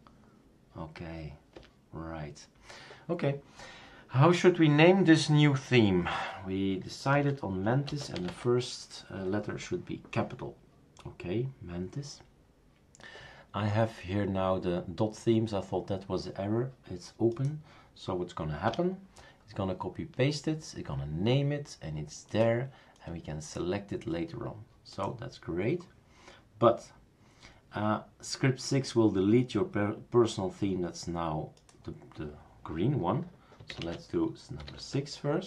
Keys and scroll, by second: 1.5 Return, 6.9-8.8 typing, 18.7 Return, 33.7-34.6 typing, 34.7 Tab.